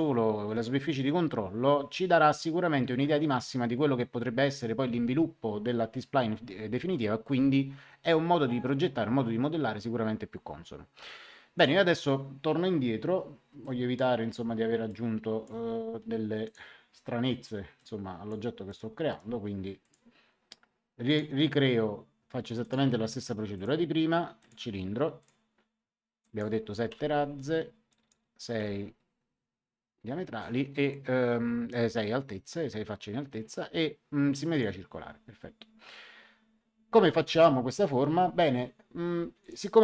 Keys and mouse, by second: 11.5 click, 13.6 click, 14.8 click, 16.4 click, 17.7 click, 18.6 right click, 19.8 click, 21.0 click, 22.6 click, 26.9 KP_7, 27.8 click, 28.5 KP_6, 34.4 click, 39.3 click.